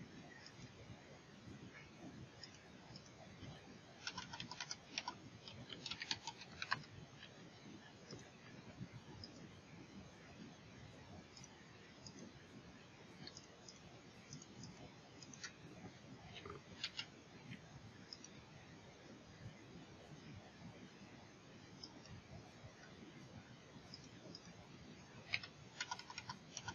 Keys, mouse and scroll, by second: 11.3 click, 12.0 click, 13.3 click, 13.7 click, 14.3 click, 14.6 click, 15.2 click, 16.8 a, 18.1-21.3 drag.